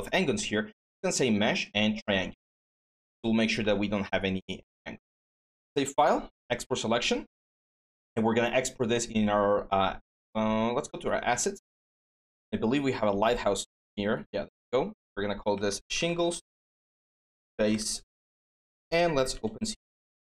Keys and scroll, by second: 15.3-18.3 typing.